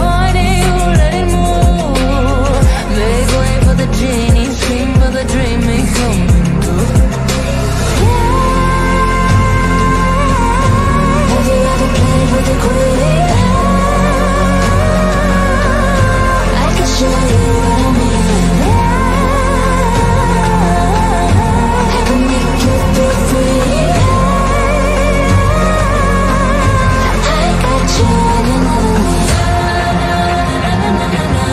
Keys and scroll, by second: 11.4 F3, 11.9 shift+F2, 18.2 shift+F2.